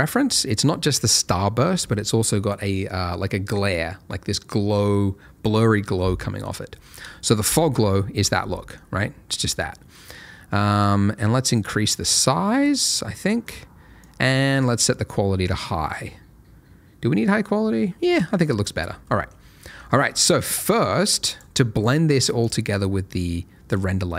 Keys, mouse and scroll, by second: 0.1 middle click, 6.6 scroll down 1, 7.4 ctrl+shift+click, 8.5 middle click, 8.8-9.3 scroll up 1, 9.3 middle click, 11.5 click, 13.2 middle click, 14.0 click, 18.5-19.1 scroll down 1, 19.1 middle click, 19.3 scroll down 1, 19.6 middle click, 19.7-20.5 scroll up 1, 20.5 middle click, 21.0 click, 24.0 middle click.